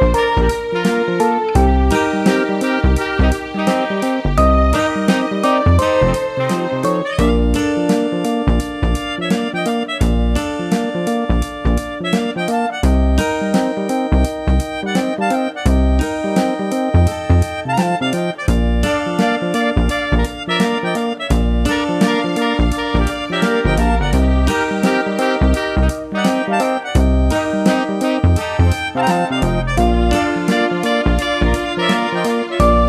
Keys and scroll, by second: 17.0 2, 17.3 Return, 31.1 super+c, 31.2 super+v.